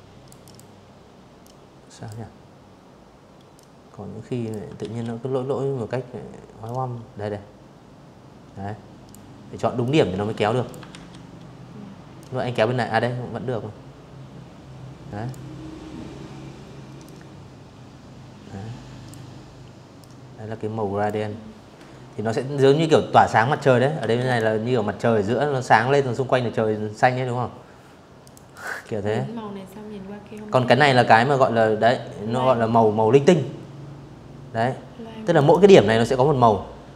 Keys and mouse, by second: 1.2 click, 2.4 ctrl+z, 4.3-6.7 drag, 7.5 click, 8.5 ctrl+z, 9.8-12.9 drag, 14.7-16.7 drag, 17.6-18.7 drag, 21.7 v, 21.9 click, 25.9 click, 26.2 click, 28.2 click, 33.0 click, 35.8 click.